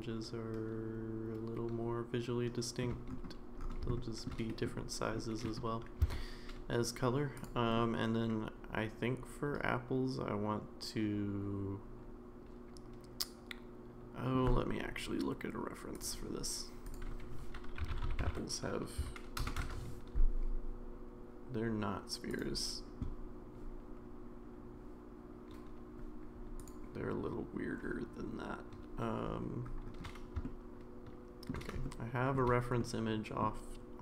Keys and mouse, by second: 3.9-4.2 shift+middle drag, 4.5 middle click, 5.2 middle drag, 6.0 Tab, 7.3 click, 7.8-14.4 middle drag, 30.4-31.5 middle drag, 31.8 shift+middle click, 32.8 middle click.